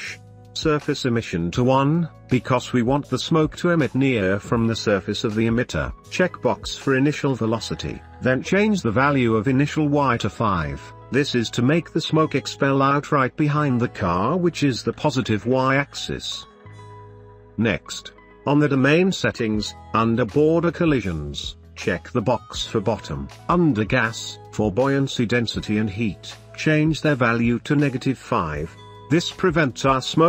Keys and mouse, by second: 7.8 click, 10.0 space, 14.5 space, 22.7 click, 23.0 space, 24.3 space, 25.8 click, 27.0 click.